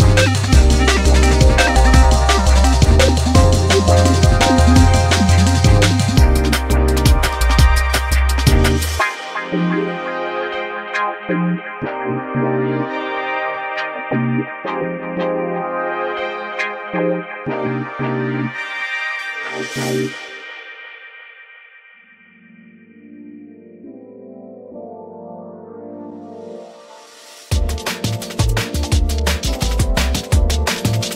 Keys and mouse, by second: 0.0 Tab, 0.0 1, 1.8 ctrl+KP_Add, 2.1 ctrl+KP_Add, 7.0 ctrl+g, 8.8 Tab, 10.0-12.9 drag, 12.3 g, 15.8 click, 16.8 click, 17.7-19.9 drag, 20.9-22.4 drag, 23.9 click, 24.8 space, 26.2-27.2 drag, 29.6-31.1 drag.